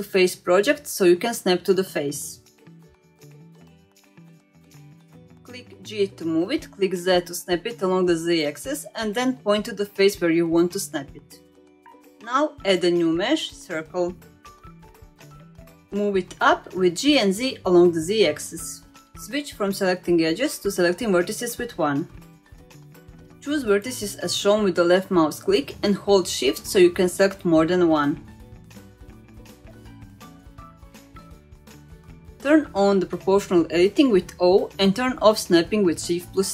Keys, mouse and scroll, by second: 5.7 g, 7.5 click, 8.0-8.3 middle drag, 8.8-9.1 middle drag, 9.1-9.5 scroll down 2, 9.8-10.1 middle drag, 10.3 shift+middle drag, 11.4 shift+scroll up 1, 11.6 shift+middle click, 12.2-13.4 scroll up 1, 13.4-15.5 drag, 16.2 g, 18.1 Tab, 18.2 middle click, 19.3-20.2 scroll up 1, 20.6 1, 21.4-22.3 scroll up 1, 22.3-22.9 middle drag, 22.9-24.2 scroll down 2, 24.3 click, 24.8 shift+click, 25.2 shift+click, 25.8-26.1 scroll up 1, 27.2 shift+click, 30.0 shift+click, 30.4 shift+click, 30.8 shift+click, 31.2 shift+click, 31.6 middle click, 34.1 click, 35.7 click.